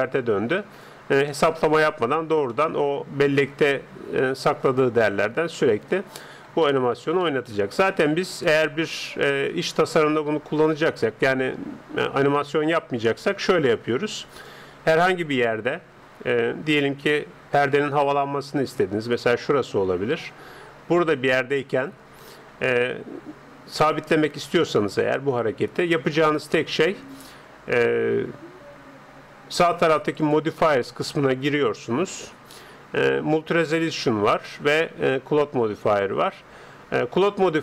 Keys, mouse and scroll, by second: 1.3-9.7 middle drag, 13.6-16.3 drag, 30.1-32.0 drag.